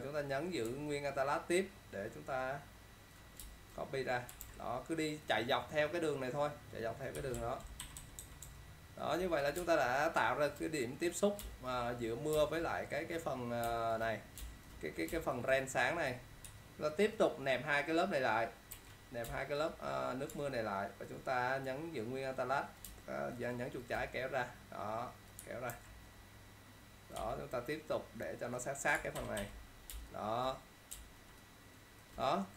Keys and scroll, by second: 3.5 alt+space, 4.6 ctrl+t, 7.9 ctrl+-, 9.7 ctrl+space, 18.9 ctrl+e, 19.3 space, 25.8 ctrl+t, 29.2 ctrl+0, 29.5 -, 30.0 space, 31.2 ctrl+space.